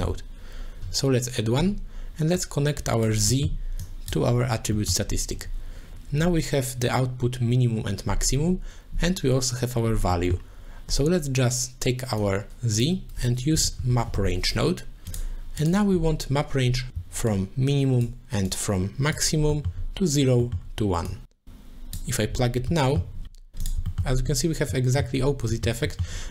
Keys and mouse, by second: 0.0 t, 0.8 middle click, 2.4 click, 3.5 middle click, 3.9 click, 4.9 middle click, 10.3 middle click, 12.2-15.2 drag, 16.9 ctrl+z, 17.3 click, 18.5 click, 19.5 middle click, 20.4 middle click, 21.1 click, 21.3 click, 22.7 middle click, 23.9 shift+middle click, 24.7 middle click, 25.5 middle click, 25.9 middle click.